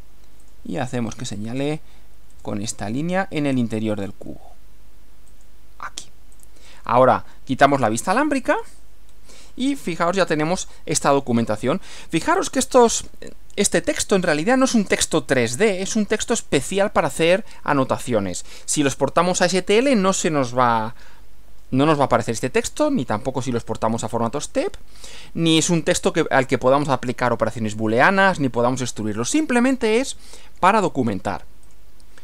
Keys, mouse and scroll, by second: 0.4 click, 2.3 click, 3.9 click, 5.3 click, 6.4 click, 7.7 click, 8.5 click, 9.1 scroll down 1, 9.5-11.4 middle drag, 11.8-13.3 middle drag, 14.2-17.8 middle drag, 18.7-20.8 middle drag, 24.2-26.0 middle drag, 29.7-30.8 middle drag, 31.6 click.